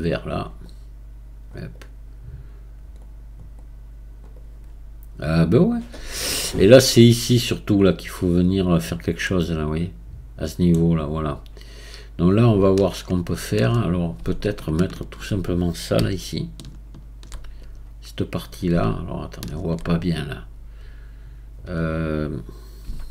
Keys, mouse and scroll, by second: 1.7-3.0 right drag, 3.0-4.3 drag, 4.3-7.3 right drag, 9.2-11.3 middle drag, 11.3-23.1 right drag.